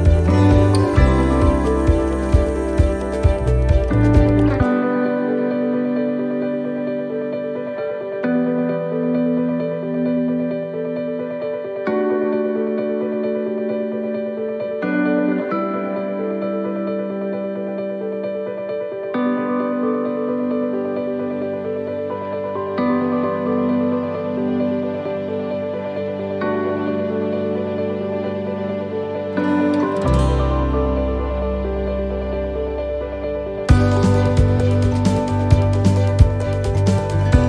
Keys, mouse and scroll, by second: 1.3 shift+right click, 2.4-5.9 shift+right click, 5.9 shift+middle click, 6.3 middle click, 7.3 shift+right click, 8.9-13.8 shift+right click, 13.8 middle click, 15.2 shift+right click, 17.0 shift+right click, 19.4 shift+right click, 19.4 middle click, 20.7 shift+right click, 21.2 middle click, 22.3 shift+middle click, 22.8-23.7 shift+scroll up 1, 23.7 u, 27.4-28.1 scroll down 7, 28.2 shift+middle click, 28.6-29.1 scroll up 3, 29.2 middle click, 29.8-30.1 scroll down 2, 30.1 middle click, 32.2 right click, 33.0 shift+right click, 33.9 c.